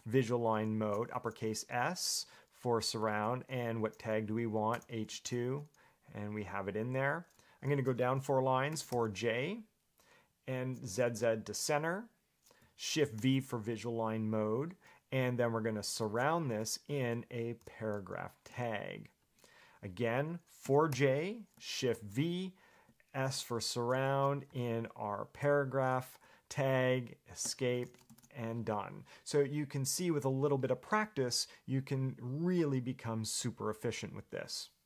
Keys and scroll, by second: 3.3 shift+s, 4.9 h, 5.2 2, 5.4 Return, 8.6-9.6 typing, 13.3 shift+v, 16.6 shift+s, 17.2 p, 17.8 Return, 20.8 4, 21.1 j, 22.1 shift+v, 24.0 shift+s, 24.7 p, 25.5 Return, 27.6 Escape.